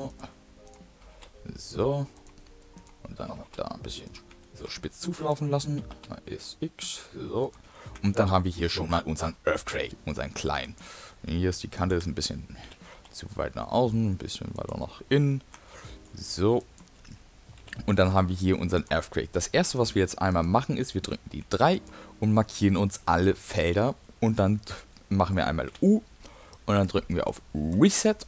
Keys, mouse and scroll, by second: 0.6 click, 0.8 s, 2.7 click, 3.2 s, 4.3 shift+middle click, 5.1 click, 5.6 s, 7.6 shift+middle click, 8.6 shift+middle click, 9.0 middle click, 9.5 scroll down 2, 10.0 middle click, 10.6 click, 12.0 shift+click, 12.6 g, 15.3 shift+middle click, 16.6 click, 17.6 g, 19.5-19.9 typing, 21.1 3, 21.7 click, 22.3 middle click, 23.5 ctrl+click, 24.1 middle click, 25.0 middle click, 25.7 u.